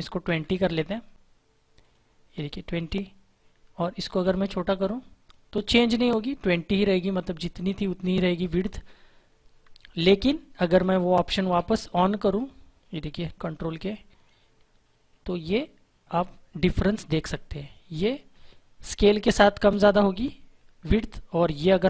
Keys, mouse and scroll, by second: 0.2 ctrl+z, 1.7 click, 4.2 shift+click, 9.9 click, 11.4 ctrl+k, 13.3 click, 14.2 click, 15.5 shift+click.